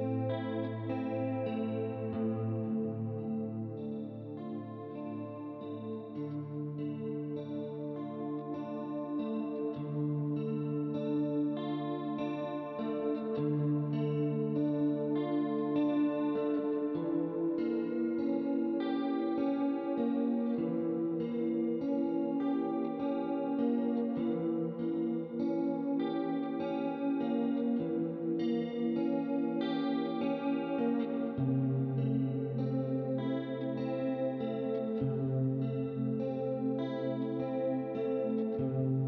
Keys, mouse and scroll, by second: 0.6 click, 1.8 click, 2.9 right click, 5.8 click, 6.5 shift+click, 7.5 click, 9.1 click, 9.7 shift+click, 10.5 click, 12.4 ctrl+z, 12.8 click, 13.9 ctrl+z, 14.4 right click, 15.6 middle click, 17.4 click, 18.8 ctrl+z, 19.2 click, 20.3 ctrl+d, 20.9 click, 22.2 middle click, 23.2 middle click, 24.3 ctrl+z, 24.6 ctrl+z, 24.9 right click, 25.5 middle click, 26.2 click, 27.0 click, 28.4 click, 29.6 click, 30.5 right click, 32.4 click, 33.2 ctrl+d, 33.8 click, 35.9 click, 37.4 click, 37.8 right click, 38.9 click.